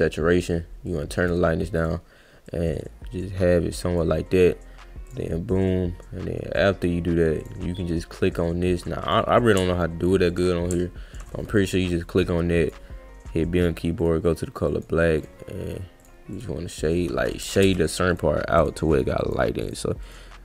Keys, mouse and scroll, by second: 0.9 click, 1.8 click, 2.5 click, 5.1 click, 7.4 click, 9.0 click, 12.6 click, 13.6 click, 14.0 click, 14.6 click, 15.2 click, 16.0 click, 16.4 click, 18.1 click, 18.6 click, 18.9 click, 19.2 click, 19.6 click, 20.1 click.